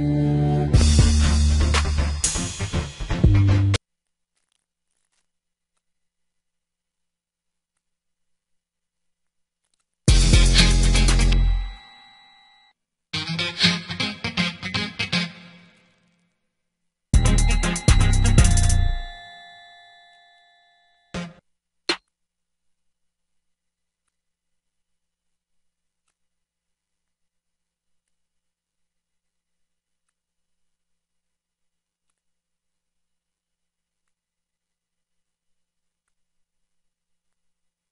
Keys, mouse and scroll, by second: 28.8 ctrl+l.